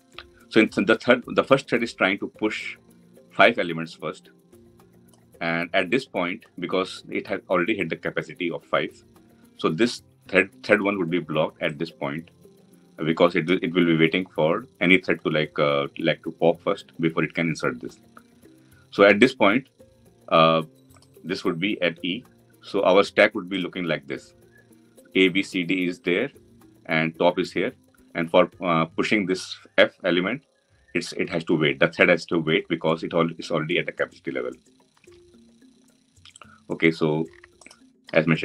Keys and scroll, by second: 37.5 ctrl+b.